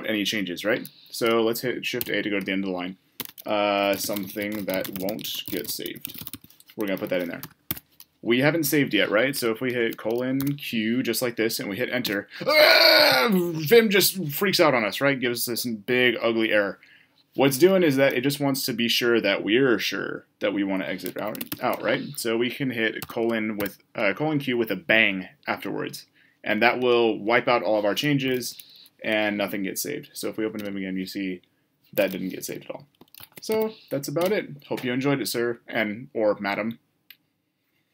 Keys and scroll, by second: 1.8 shift+a, 7.6 Escape, 24.2 typing.